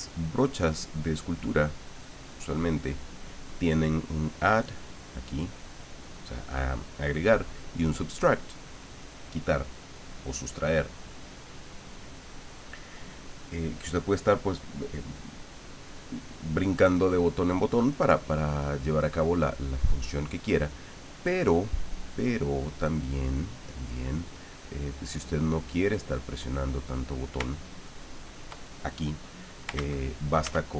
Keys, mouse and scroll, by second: 0.2 click, 0.8-3.2 drag, 10.4 click, 11.1-12.7 drag, 17.6 right click, 19.2-21.2 drag, 22.2 click, 23.4 click, 24.3-27.0 drag, 27.5 ctrl+click, 29.7 ctrl+z, 30.4 ctrl+z.